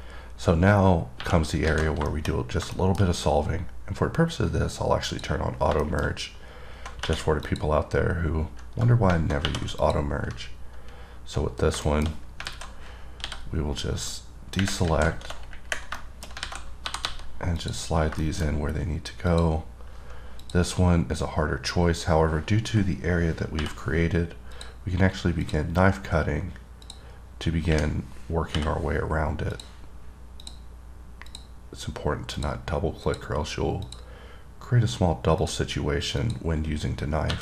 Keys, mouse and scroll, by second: 0.7-1.0 scroll down 1, 2.3 middle click, 2.5-2.9 scroll up 3, 3.0 middle click, 3.3-5.3 scroll up 1, 5.3 click, 6.1 middle click, 6.3 scroll up 3, 7.7 click, 10.0 click, 11.8-12.4 scroll down 5, 12.1 middle click, 13.6-14.3 scroll down 6, 14.3 middle click, 16.2 middle click, 16.5-16.8 scroll up 3, 18.4 click, 18.5 middle click, 18.7 scroll up 2, 19.5 click, 20.7 click, 22.6 scroll down 3, 24.8 click, 25.7 click, 27.1 click, 28.4-28.8 scroll down 1, 29.7 click, 30.7 click, 31.5 click, 32.6 click, 33.3 click, 34.1 click, 35.6 click, 36.4 click.